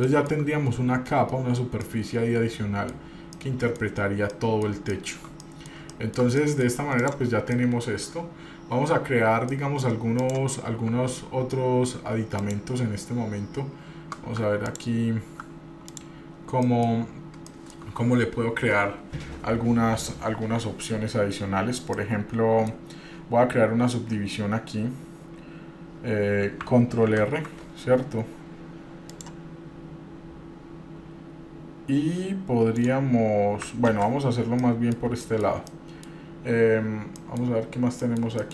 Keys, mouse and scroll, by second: 0.1-0.5 shift+middle drag, 0.7 scroll up 1, 1.8 scroll down 1, 2.0-3.1 middle drag, 3.3 scroll down 2, 3.5-4.0 middle drag, 4.0 scroll down 1, 4.5-4.9 middle drag, 5.1 shift+middle drag, 5.6 middle click, 6.0-6.8 shift+middle drag, 7.2 click, 7.7 middle click, 9.7 middle click, 10.4 click, 11.1 Tab, 12.6 click, 14.8 alt+click, 16.1 click, 16.8 middle click, 17.3-17.6 scroll up 1, 17.7 shift+middle click, 18.8-19.5 scroll down 3, 21.7-22.1 scroll up 1, 22.1 middle click, 23.0-23.6 scroll up 1, 27.2 ctrl+r, 34.1 ctrl+z, 34.8 middle click, 35.4 shift+middle click, 35.9 middle click, 37.4 middle click, 37.9 scroll up 2, 38.2 middle click.